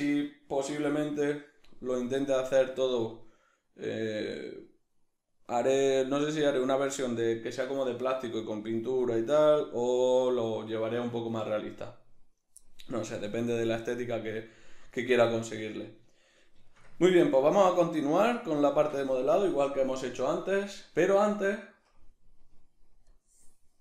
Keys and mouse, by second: 8.5-23.8 middle drag.